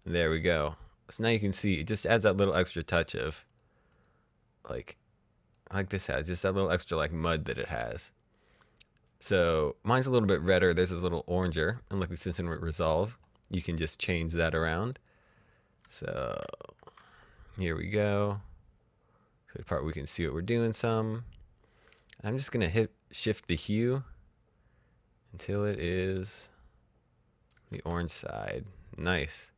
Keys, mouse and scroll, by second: 0.6 click, 5.5 click, 12.9 click, 14.8 click, 16.3 shift+h, 17.9 click, 23.1 click, 27.5 shift+h.